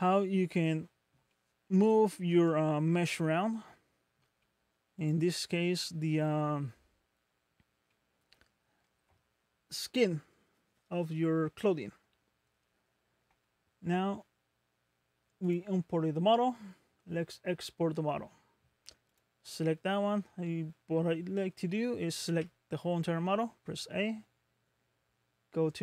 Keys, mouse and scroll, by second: 0.2-0.5 scroll up 3, 1.3 middle click, 4.4 middle click, 5.0 click, 5.6 middle click, 7.5 scroll down 1, 7.9 middle click, 15.5 click, 19.1 click, 21.2 scroll down 2, 21.7 middle click, 22.3 a, 23.0 scroll up 2.